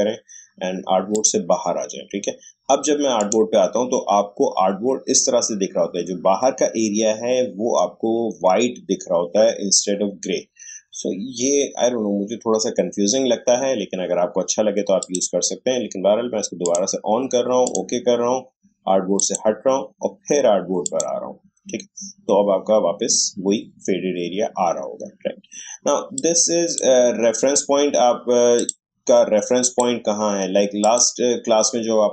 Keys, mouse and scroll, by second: 15.0 click, 15.1 click, 26.2-28.6 drag.